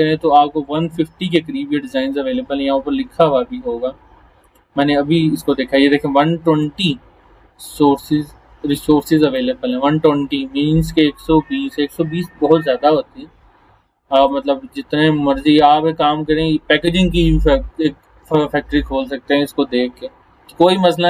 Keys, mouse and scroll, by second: 0.4 scroll down 1, 1.4 scroll down 1, 2.3 scroll up 1, 6.7-8.2 drag, 11.3 scroll down 1, 11.9-12.5 scroll down 2, 14.2 click, 16.0 scroll down 1, 19.8 scroll down 1.